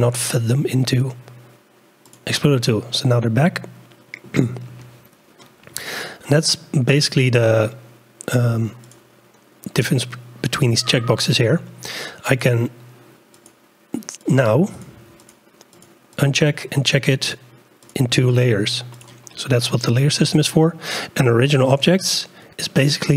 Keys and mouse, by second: 0.9-2.3 drag, 3.4-4.2 drag, 8.8 click, 12.4 click, 13.4 click, 14.3 click, 15.3 click, 16.2-21.6 drag.